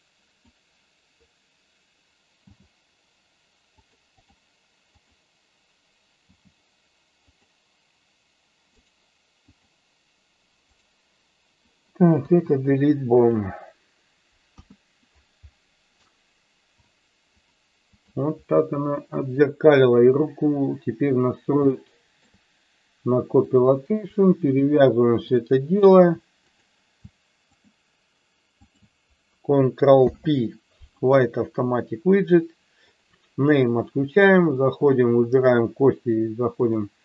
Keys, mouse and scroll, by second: 2.4 g, 3.7 click, 4.3 click, 5.0 click, 6.4 g, 8.7 right click, 10.9 right click, 12.3 Delete, 14.6 KP_1, 17.4 click, 21.8-22.2 shift+middle drag, 25.4 shift+click, 26.4 click, 27.6 shift+click, 28.6 shift+click, 30.0 ctrl+p, 32.9 click, 36.8 click.